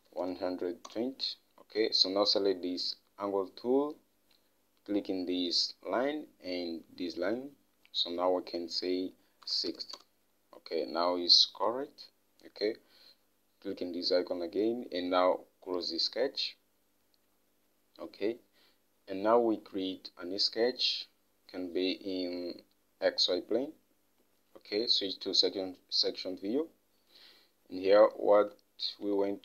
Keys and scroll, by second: 0.0-0.9 typing, 1.3 Return, 9.9-10.6 typing, 28.9 alt+Tab.